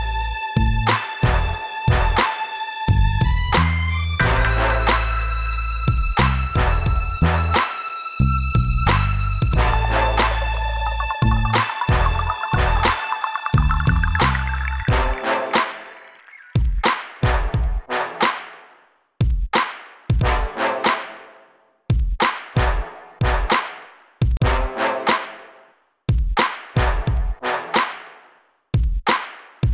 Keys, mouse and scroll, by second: 0.1 click, 0.8 click, 3.0 click, 5.4 click, 8.3 click, 8.8 scroll down 2, 9.8 click, 10.9 scroll down 1, 10.9 ', 13.8 click, 15.6 click, 19.9 scroll up 2, 22.4 scroll down 2, 24.0 scroll up 2, 27.9 scroll down 2.